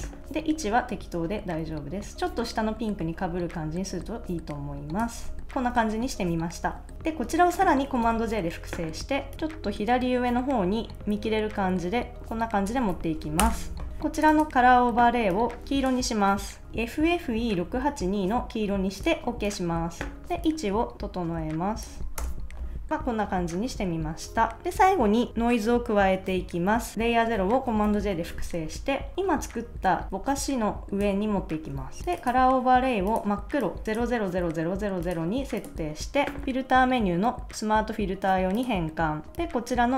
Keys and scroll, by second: 8.0 super+j, 13.4 Return, 16.7 2, 22.2 Return, 22.9 super+s, 27.8 super+j.